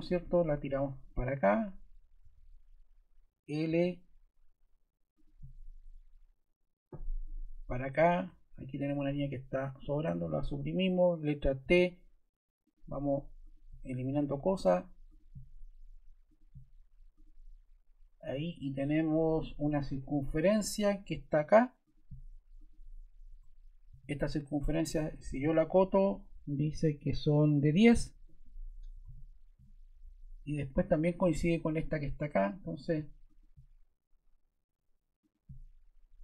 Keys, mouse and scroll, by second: 8.8 click, 9.9 BackSpace, 11.5 t, 12.5 click, 13.4 click, 23.8 d, 28.6-29.5 typing.